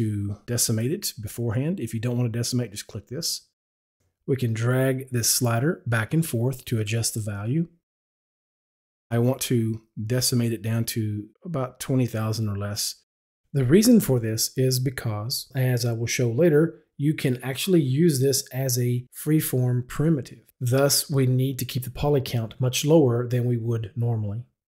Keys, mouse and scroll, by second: 4.4-8.0 drag, 9.2-12.9 drag.